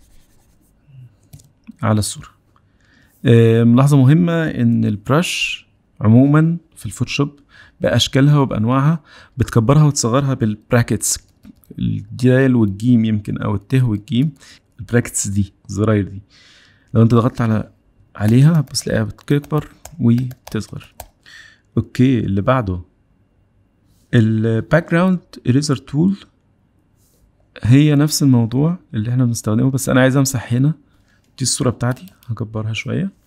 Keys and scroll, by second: 11.0-12.4 typing, 13.8 ], 14.0 [, 14.2 [, 14.3 [, 19.1-21.0 typing.